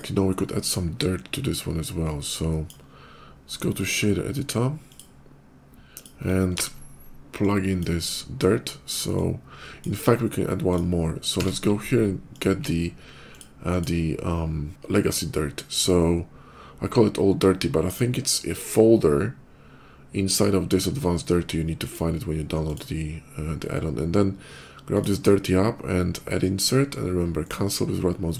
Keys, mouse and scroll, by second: 1.9 click, 3.5 click, 4.6 click, 5.8 click, 6.3 ctrl+v, 7.2 click, 9.0 click, 10.5 click, 11.2 q, 13.1 click, 13.4 alt+click, 21.5 click, 22.5 click, 24.6 click, 26.4 click, 27.2 right click, 28.1 click.